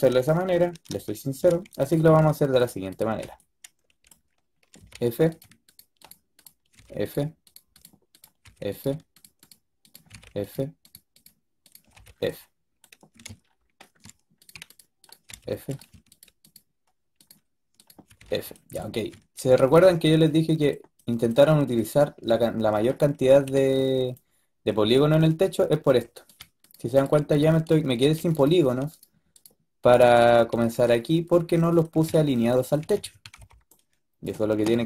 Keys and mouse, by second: 0.0 ctrl+z, 0.4 ctrl+z, 0.7 ctrl+z, 3.1 right click, 3.4 middle click, 3.8 middle click, 4.7 f, 6.6 f, 8.3 f, 10.0 f, 11.8 f, 15.2 f, 18.1 f, 19.3 a, 23.1 a, 26.1-27.9 drag, 27.9 f, 30.4 f, 30.8-32.1 middle drag, 32.7 a, 32.9 a, 33.1 a, 33.2 b.